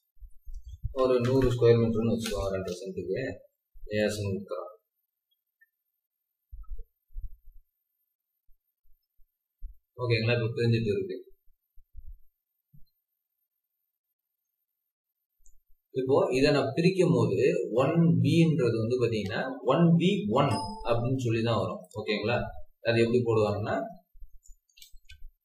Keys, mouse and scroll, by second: 0.7-1.8 typing, 2.2 Return, 14.2-16.1 scroll down 1, 16.1 scroll up 1, 22.5 scroll down 1, 23.3 scroll up 1, 23.7 Escape, 24.2-24.7 typing.